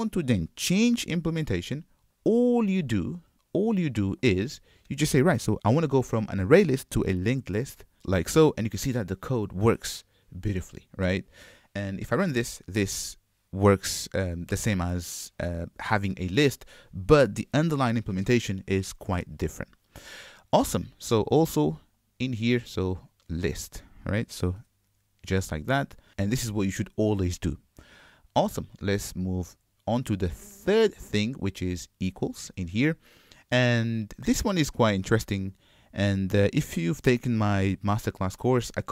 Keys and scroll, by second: 1.0 ctrl+Tab, 8.0 Return.